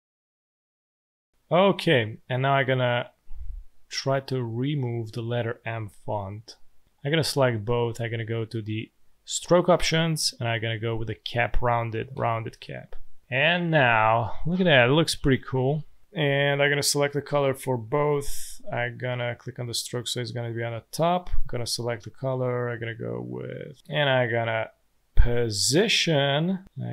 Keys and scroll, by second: 1.2 space, 5.7 Delete.